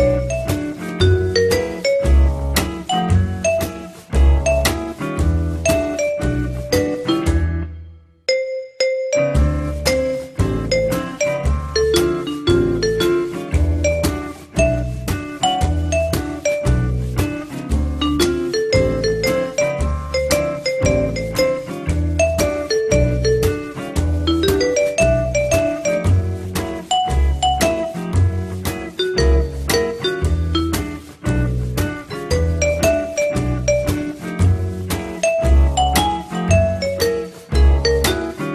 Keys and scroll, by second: 7.5 f, 10.2 l, 16.7 p.